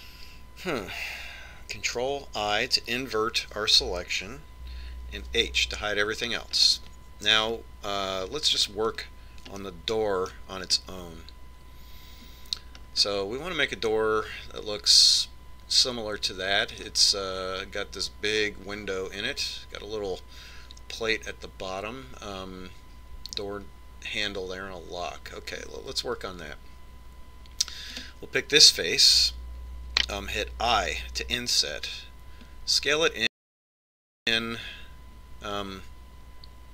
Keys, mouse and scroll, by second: 3.8 ctrl+i, 7.3 h, 8.6-10.4 middle drag, 11.4-13.3 middle drag, 13.3-14.1 scroll up 1, 14.1 scroll up 1, 14.7-15.7 scroll down 1, 15.7-17.6 middle drag, 29.9 right click.